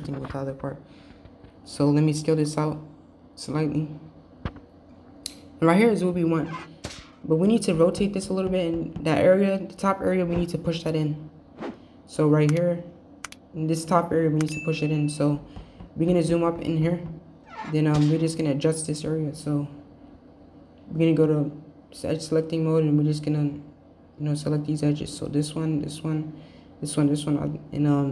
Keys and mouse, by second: 0.9 KP_3, 1.3 e, 7.0 r, 15.0 shift+middle click, 16.4 shift+middle click, 18.0-19.2 middle drag, 21.5 click, 23.1 shift+click, 23.7 shift+click, 24.3 shift+click, 24.7 click, 25.8 shift+click, 26.6 shift+click, 27.1 shift+click.